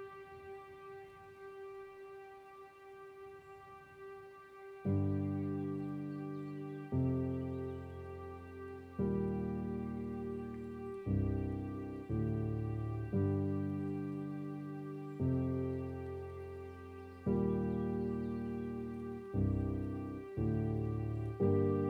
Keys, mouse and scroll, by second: 1.1-1.5 scroll up 6, 1.5-2.7 middle drag, 2.7-3.4 scroll down 3, 3.4-3.8 scroll up 4, 3.8 middle click, 4.4-4.8 scroll down 3, 4.8-5.9 middle drag, 5.9 scroll up 4, 6.2 middle click, 7.0-7.4 scroll down 3, 7.4-11.6 middle drag, 11.6-14.6 drag, 16.6-17.2 scroll down 6, 17.2 middle click, 18.1 scroll up 2, 18.3-21.1 middle drag, 21.1 scroll down 3, 21.4 middle click.